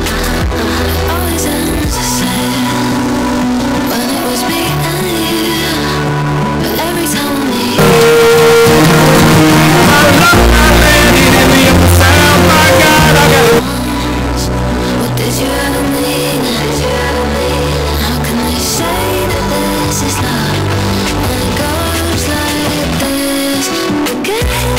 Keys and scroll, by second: 14.1 Page_Down.